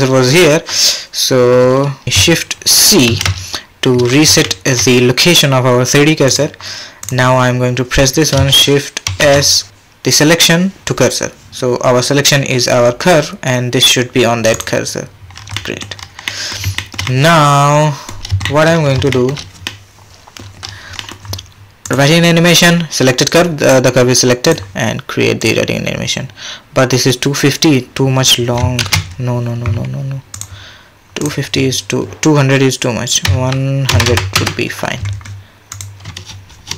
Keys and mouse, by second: 3.1 shift+c, 4.4-4.7 shift+drag, 7.0 click, 9.1 shift+s, 15.4 middle drag, 15.8-16.3 middle drag, 16.5 shift+middle drag, 16.7 shift+drag, 16.9 shift+middle click, 18.1-18.4 shift+middle drag, 18.4 shift+click, 18.6 shift+middle click, 19.1 shift+middle click, 19.7 middle click, 21.0 middle click, 21.9-23.4 drag, 24.6-25.8 drag, 28.8 ctrl+z, 30.3-36.1 drag, 34.0 KP_0, 36.3 space.